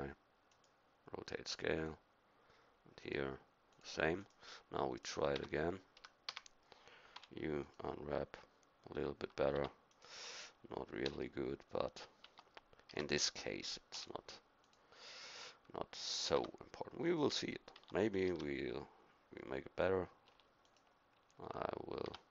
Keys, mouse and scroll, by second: 5.4 Tab, 6.0 a, 6.3 a, 7.2 u, 9.5 Tab, 11.1 u, 12.2 Tab, 12.9 a, 13.9 u, 16.4 Tab, 17.8 Tab, 18.3 a, 20.3 u, 22.1 Tab.